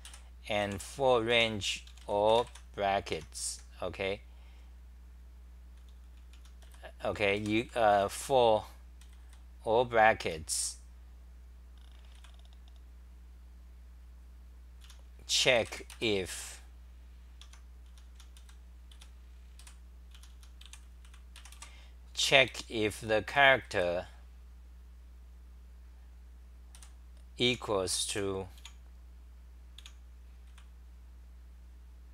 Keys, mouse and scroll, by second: 0.0 g, 0.6 p, 1.3 u, 3.1 Home, 3.5 /, 5.6-9.2 typing, 10.2 t, 12.1 c, 14.8 t, 15.3 u, 17.4 Home, 17.6-23.7 typing, 27.4 h, 28.1 s, 28.6 e, 29.8 e, 30.5 c.